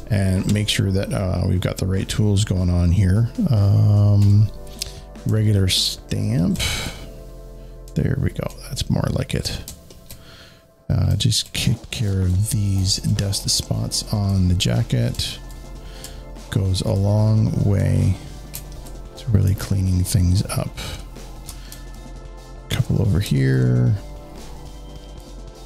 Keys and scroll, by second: 4.0 z, 19.3 alt+space.